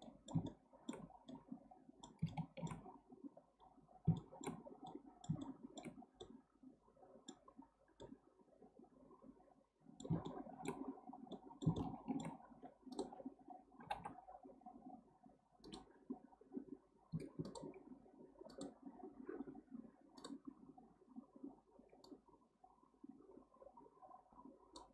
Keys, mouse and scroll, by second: 0.0-3.4 middle drag, 3.4-4.1 scroll down 1, 4.1 scroll down 4, 4.2-5.9 shift+middle drag, 5.9 scroll down 1, 6.2-7.5 middle drag, 7.5-8.0 scroll up 5, 8.0-11.0 middle drag, 11.0-11.3 scroll up 2, 11.3-12.9 middle drag, 12.9 click, 13.8 g, 17.4 alt+click, 18.5 click, 20.2 click, 22.0-24.9 drag.